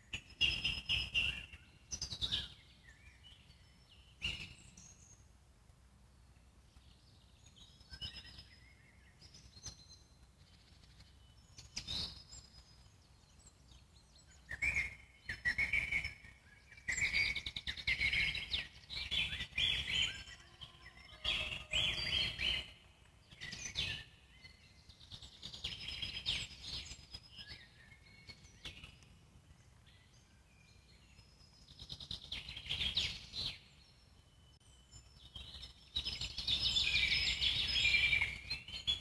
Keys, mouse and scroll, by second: 0.6 alt+middle click, 1.2 click, 2.3 g, 4.1 click, 4.5 s, 5.2-7.2 alt+middle drag, 7.6 click, 8.5 s, 9.2-11.2 alt+middle drag, 11.2 click, 12.2 g, 13.8 alt+middle click, 14.7 click, 17.6-20.8 alt+middle drag, 21.5 Tab, 22.1-22.6 middle drag, 22.6 scroll down 1, 22.8-24.4 alt+middle drag, 24.4 click, 29.7-30.7 scroll up 2, 30.7-32.8 drag, 33.2-33.8 scroll down 2, 33.8-35.9 alt+middle drag, 36.9-38.4 middle drag, 38.4-39.0 drag.